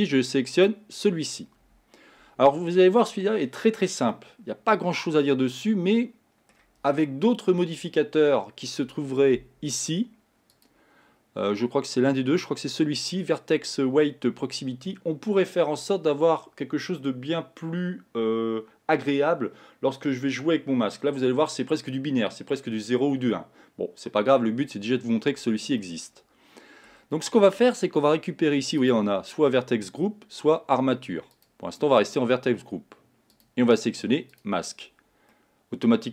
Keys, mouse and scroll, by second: 4.2-7.3 middle drag, 10.6-13.7 drag, 26.0-28.9 middle drag, 28.9-31.6 drag, 33.4-35.4 drag, 35.4-36.1 middle drag.